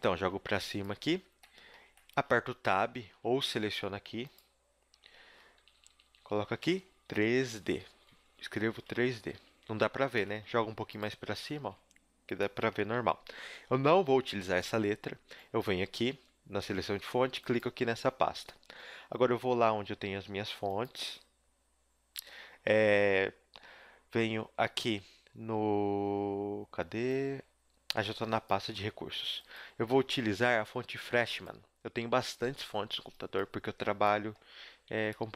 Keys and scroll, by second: 0.1 g, 2.6 Tab, 3.1 Tab, 4.9 Tab, 5.5-8.8 typing, 9.3 Tab, 10.2 g.